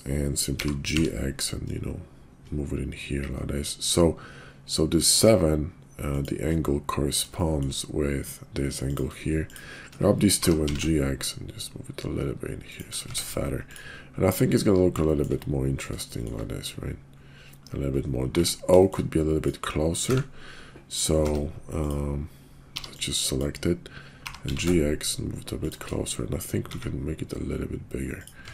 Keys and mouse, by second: 0.5 g, 7.3 shift+click, 9.4 shift+click, 10.3 g, 13.0 Tab, 13.6 click, 15.2 shift+click, 16.1 shift+drag, 18.3 Tab, 18.8 shift+click, 20.0 a, 21.1 Tab, 22.7 b, 24.2 g, 26.6 s, 28.4 Tab.